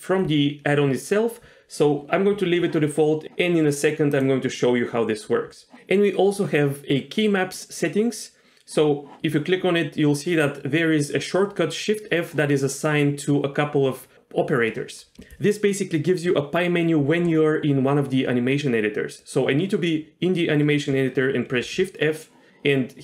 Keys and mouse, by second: 19.2 middle click.